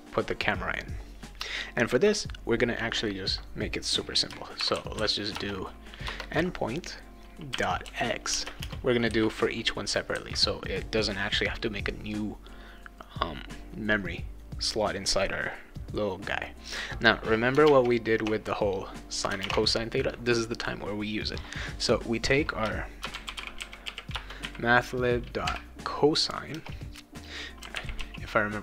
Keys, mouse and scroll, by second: 4.6 shift+n, 5.0 i, 5.4 BackSpace, 6.1 Return, 7.5-9.1 typing, 22.8-24.4 typing, 25.4 c, 26.5-28.5 typing.